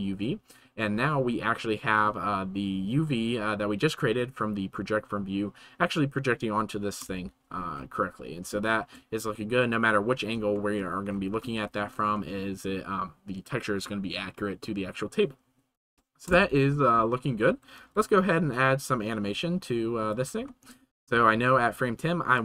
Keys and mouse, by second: 1.1-2.0 middle drag, 7.0 KP_0, 8.8-9.3 shift+middle drag, 9.4-10.3 middle drag, 10.6 shift+middle click, 11.7 shift+middle click, 12.2-12.7 middle drag, 15.8 ctrl+s, 16.3 KP_0, 17.2-17.6 shift+middle drag, 17.8 ctrl+s, 19.4 click.